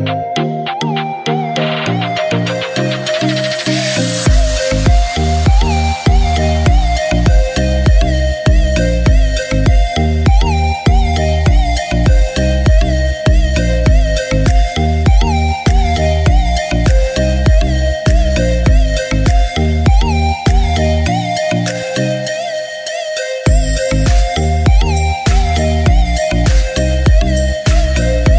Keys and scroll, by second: 0.3 0, 2.3 typing, 3.8 typing, 4.8 typing, 22.7 ctrl+e, 24.5 ctrl+e, 25.4 c.